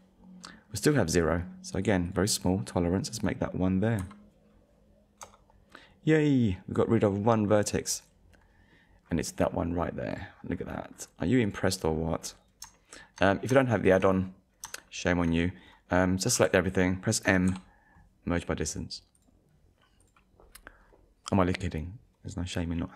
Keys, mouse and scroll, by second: 5.2 Return, 7.0-7.4 scroll up 1, 8.7 scroll up 1, 9.5-9.8 scroll up 1, 10.1 click, 10.5 scroll up 1, 10.9-11.3 scroll down 1, 11.4 click, 11.9 scroll down 1, 12.8 shift+middle click, 13.3-13.7 scroll down 2, 13.8 shift+middle click, 14.9 shift+middle click, 16.4 a, 17.5 m, 19.2 click, 20.0 click.